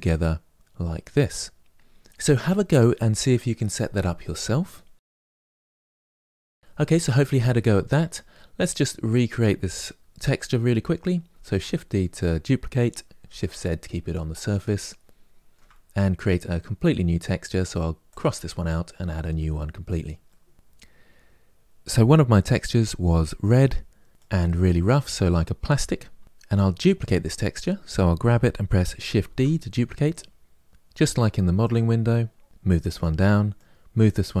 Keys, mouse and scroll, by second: 8.6-10.2 scroll down 2, 11.4 shift+d, 14.7-18.0 shift+middle drag, 18.0-19.6 drag, 24.1-27.4 drag, 29.1 shift+d, 32.5 click, 33.4 click.